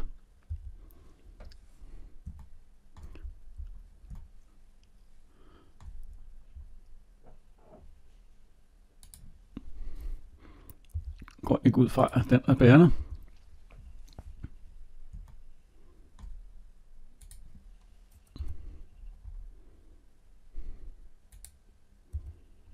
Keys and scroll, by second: 10.7 Delete, 18.2 Delete.